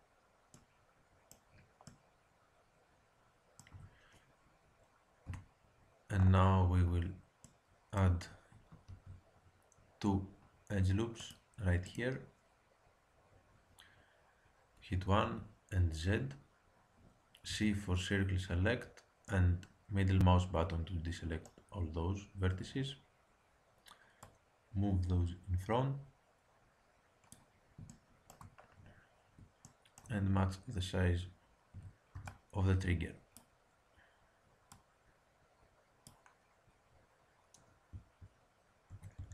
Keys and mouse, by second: 0.4 middle click, 1.8 middle click, 3.6 Tab, 5.2 KP_1, 8.8 ctrl+r, 14.6 KP_1, 15.2 z, 17.4 c, 24.2-26.0 drag, 27.9 middle click, 31.7 a, 32.1 b, 34.7-36.4 drag, 38.9 a, 39.1 b.